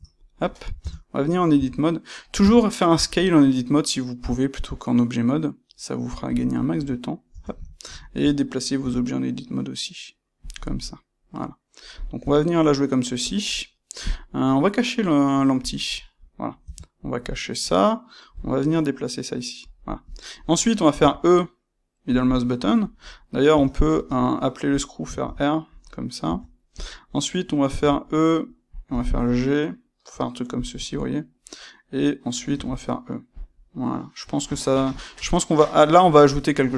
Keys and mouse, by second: 0.7 Tab, 1.5 a, 6.3 click, 6.7 Tab, 7.7 ctrl+middle click, 8.7 g, 10.4 click, 10.5 middle click, 12.1-13.2 middle drag, 12.1 g, 13.2 click, 15.6 click, 16.1-19.7 middle drag, 16.5 Tab, 18.2 g, 20.0 click, 20.9 e, 22.1 click, 23.5 Tab, 23.8 space, 25.7 click, 26.2 Tab, 26.7 click, 27.7 e, 28.7 click, 28.8 g, 30.6 click, 32.0-33.4 middle drag, 32.5 e, 33.4 click, 33.5-36.7 middle drag.